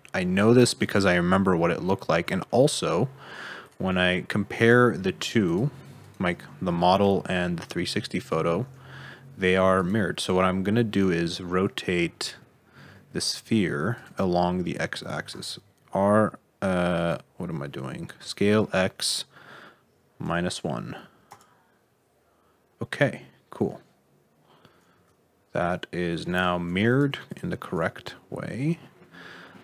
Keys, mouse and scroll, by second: 2.1 scroll down 1, 2.2 middle click, 2.5 alt+z, 3.6 click, 4.5 click, 5.3 g, 6.0 Right, 7.3 ctrl+z, 8.1 Left, 8.5 g, 11.1-13.3 scroll down 7, 13.3 s, 15.2 s, 18.2 s, 22.1-23.2 scroll up 5, 23.2-24.6 scroll down 2, 24.6 e, 24.9 z, 26.8 click, 27.2 click, 27.6 r.